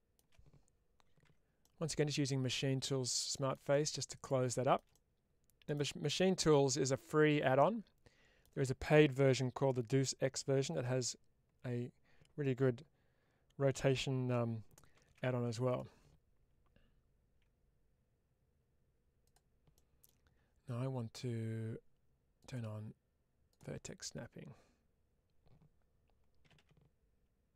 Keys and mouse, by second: 1.5-2.7 middle drag, 3.6 middle click, 4.3 shift+middle click, 4.8 middle click, 6.2-8.3 middle drag, 19.1 click, 19.6 middle click, 22.3-23.7 drag, 27.1 ctrl+g.